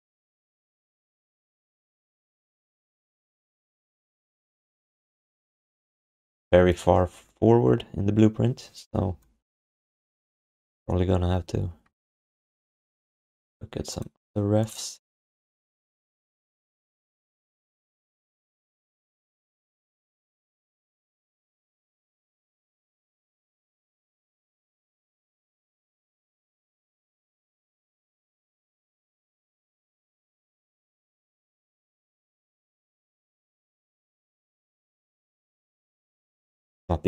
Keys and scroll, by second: 11.8 space, 14.9 space, 15.6 space, 16.9 w, 19.2 f.